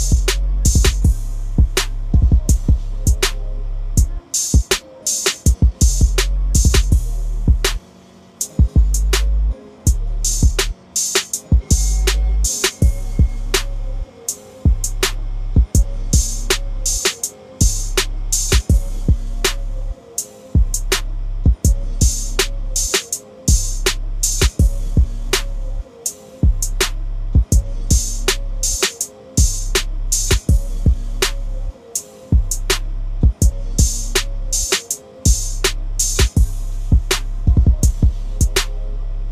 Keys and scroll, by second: 1.0 ctrl+l, 16.7 ctrl+l, 35.3 ctrl+l.